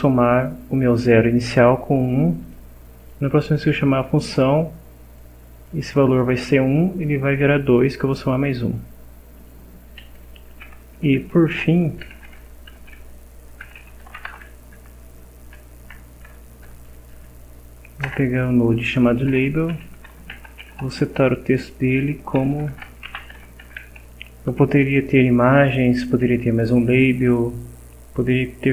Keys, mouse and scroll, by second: 2.4 click, 3.0 click, 5.2 click, 6.1 click, 7.8 click, 9.4 click, 10.9 Tab, 11.8-15.3 typing, 15.8 Return, 17.3 Down, 19.0-24.1 typing, 26.5 Left, 27.1 Left.